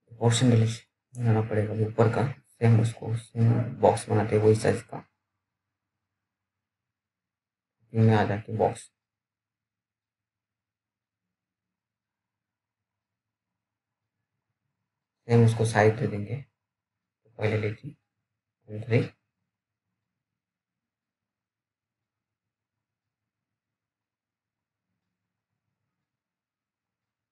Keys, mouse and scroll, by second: 0.1 click, 2.2 t, 4.2 click, 9.7-11.7 scroll up 1, 11.7-12.2 scroll down 1, 12.2 click, 12.3 click, 13.7 super+middle click, 15.1 click, 19.0 BackSpace, 23.5 f, 23.7-24.1 scroll down 1, 24.1 right click, 24.4 click, 25.3 f, 26.1 scroll up 1.